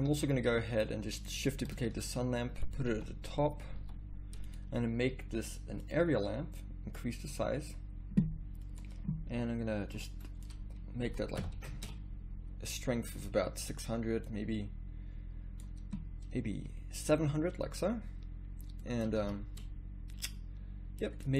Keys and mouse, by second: 0.1 a, 1.5-2.9 drag, 1.9 shift+d, 2.8 r, 3.8 r, 11.4 KP_0, 12.0 shift+z, 19.2 z, 19.3 z.